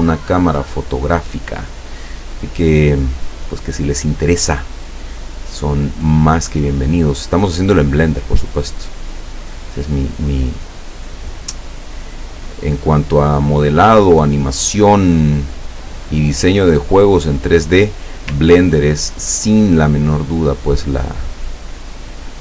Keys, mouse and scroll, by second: 5.6 click, 7.7 click, 8.6 click, 9.4-17.6 drag, 18.5-18.9 ctrl+scroll up 2, 20.4 click.